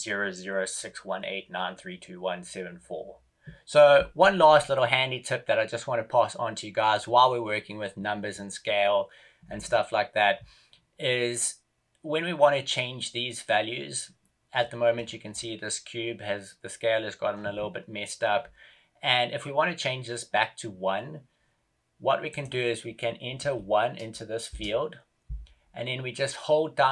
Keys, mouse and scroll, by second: 14.9 middle click.